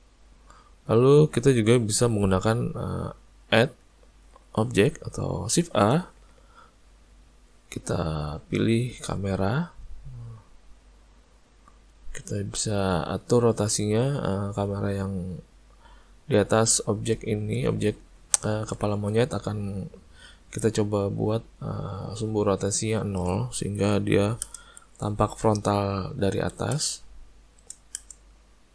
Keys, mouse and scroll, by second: 1.2 middle click, 1.6 middle click, 2.8 click, 3.7 middle click, 5.6 shift+a, 10.7 click, 12.3 middle click, 14.6 middle click, 15.2 middle click, 16.3 middle click, 16.9 shift+middle click, 17.4 ctrl+middle click, 17.7 shift+middle click, 18.0 middle click, 18.5 ctrl+middle click, 18.9 ctrl+middle click, 19.3 middle click, 22.6 click, 25.9 click, 27.4 click.